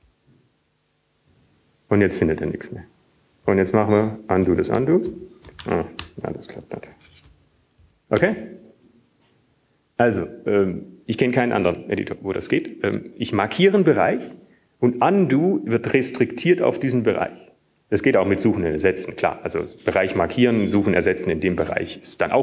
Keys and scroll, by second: 1.3 typing, 3.9-4.5 typing, 6.5 ctrl+/, 8.1 ctrl+/, 9.1 ctrl+/, 10.1 Up, 11.7 Down.